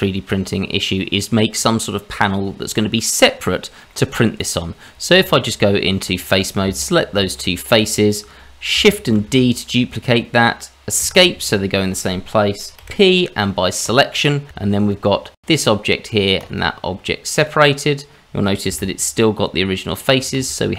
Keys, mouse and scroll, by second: 3.3-3.9 scroll up 1, 3.9 middle click, 4.3 click, 4.7-5.1 scroll down 1, 5.1 Tab, 6.4 click, 6.8 shift+click, 7.3-8.7 scroll up 1, 8.7-9.1 scroll up 1, 9.1 shift+d, 12.8 p, 14.6 Tab, 15.1-15.4 scroll down 2, 15.4 click, 16.4 click, 17.3 click, 18.6 g, 20.5-20.7 scroll up 2.